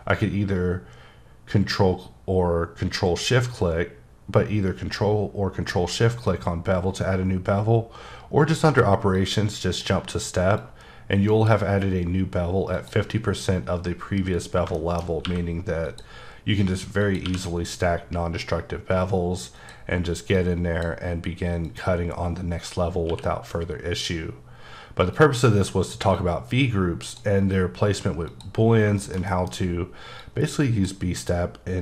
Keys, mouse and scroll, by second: 9.2 click, 10.6 click, 12.8 click, 13.3-14.6 scroll up 4, 14.8 shift+middle click, 15.3 q, 15.9 click, 17.0 click, 17.3 q, 19.6 click, 20.4 click, 21.7 click, 23.1 q, 25.1 click, 26.1 click, 28.3 click, 28.6 scroll down 3, 29.0 shift+middle click, 30.2 click.